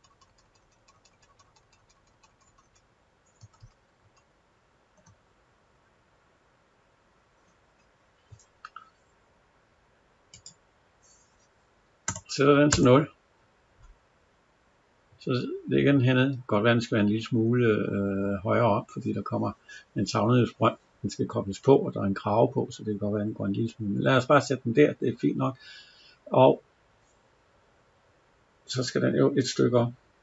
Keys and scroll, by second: 4.8 Up, 12.6 Return.